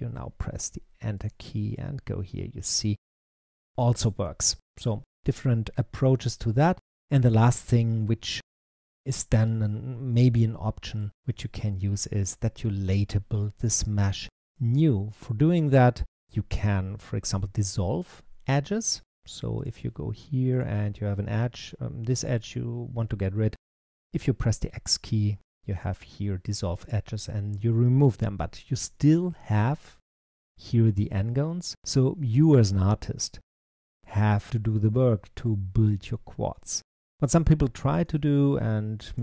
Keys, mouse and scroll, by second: 1.1 click, 1.6-4.7 middle drag, 7.1 click, 7.9-10.9 middle drag, 13.7-16.2 middle drag, 16.7-19.2 scroll down 1, 19.2 scroll down 1, 19.5 click, 20.4 click, 22.0 shift+click, 23.7 x, 33.6-37.7 middle drag, 37.7 click, 38.9 click.